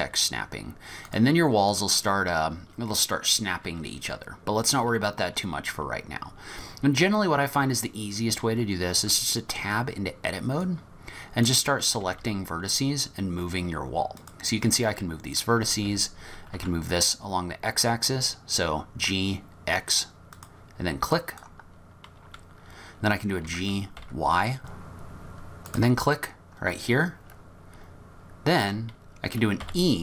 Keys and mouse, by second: 1.7 click, 9.0 Tab, 10.7 click, 12.0 g, 14.9 click, 15.6 g, 21.2 click, 23.5 g, 29.6 e.